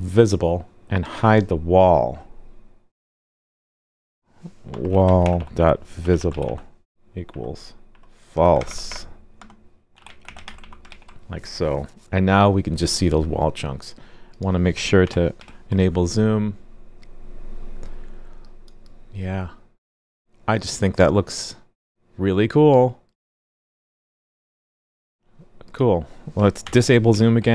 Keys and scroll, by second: 10.9 super+s, 15.0 super+/, 15.4 super+s, 26.6 super+/, 27.1 super+s.